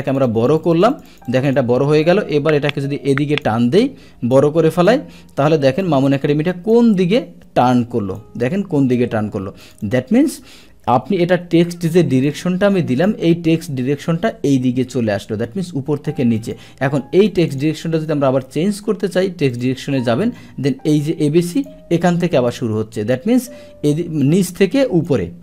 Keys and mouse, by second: 0.1 click, 0.3 click, 0.6 click, 0.9 click, 1.3 click, 1.5 click, 2.8 click, 4.3 click, 5.8 click, 7.6 click, 9.6 click, 9.8 click, 10.8 Delete, 11.3 Delete, 12.3 click, 16.4 click, 17.3 click, 17.5 click, 18.3 ctrl+a, 19.5 click, 21.6 click, 22.5 click, 24.2 click.